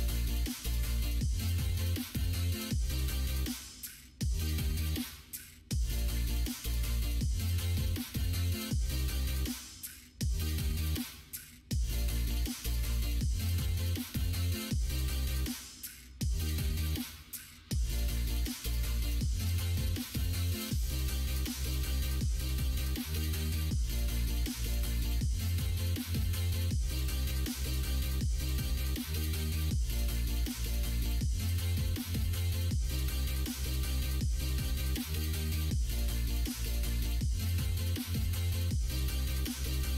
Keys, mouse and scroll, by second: 1.4 m, 2.7 middle click, 3.8 click, 4.2 click, 5.0 m, 6.5 Tab, 6.9 click, 7.3-8.6 middle drag, 8.8 shift+middle click, 9.1 middle click, 9.8 middle click, 11.3 Tab, 13.8-17.7 middle drag, 18.2 middle click, 19.1 3, 19.3 click, 19.8 middle click, 20.6 click, 22.2 shift+click, 24.1 shift+click, 26.1-28.1 middle drag, 28.6 shift+click, 29.3 shift+click, 30.1 g, 32.8-34.8 middle drag, 35.5 Tab, 36.1-38.5 middle drag, 38.6 Tab, 39.7 middle click.